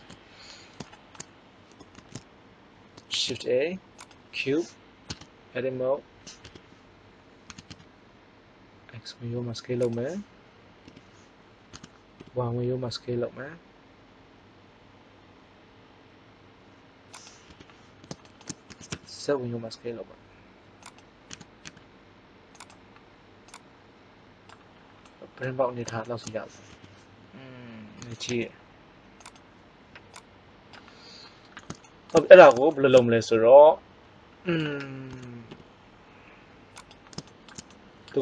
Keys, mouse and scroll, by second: 1.9 shift+a, 3.0 shift+a, 5.0 Tab, 6.4 KP_1, 7.4 s, 9.9 click, 10.8 KP_3, 11.7 s, 17.2 click, 17.4 KP_1, 18.6 s, 21.2 s, 23.3 click, 26.6 KP_1, 27.9 s, 32.7-33.7 middle drag, 35.0 s.